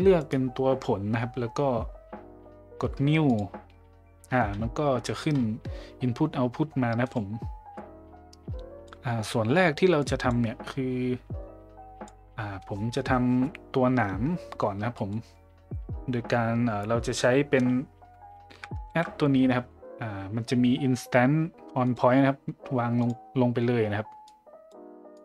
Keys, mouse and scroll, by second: 3.3 click, 5.0 middle click, 7.1 drag, 7.7-8.9 drag, 10.0 click, 10.7-12.1 drag, 15.0 middle click, 18.9 shift+a, 24.3 click, 25.1 click.